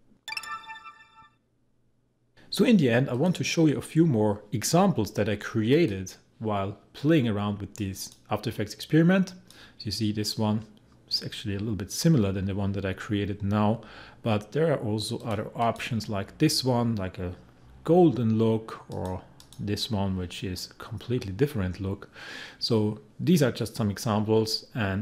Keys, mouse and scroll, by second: 3.1 click, 5.7-10.8 drag, 10.8-11.2 scroll down 1, 15.2 click, 18.9 click.